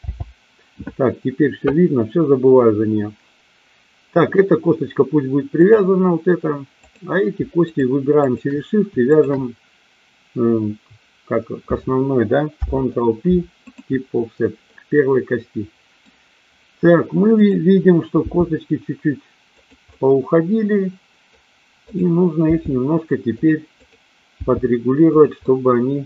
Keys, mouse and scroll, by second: 0.0 n, 5.6 click, 6.7 click, 8.1 shift+click, 9.1 shift+click, 12.5 ctrl+p, 14.6-16.0 middle drag, 17.4 click, 18.2 g, 19.5 click, 19.9-21.2 middle drag, 22.4 g, 23.7 click, 24.4 g, 25.0 click, 25.5-26.0 middle drag.